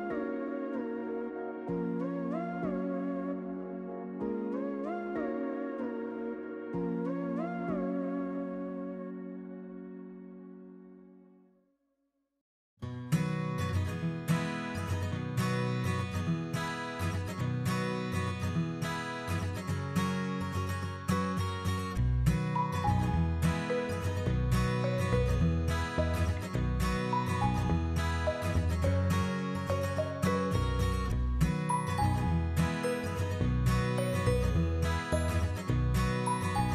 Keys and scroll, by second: 16.2-17.7 typing, 19.9 ctrl+v, 28.9 ctrl+g.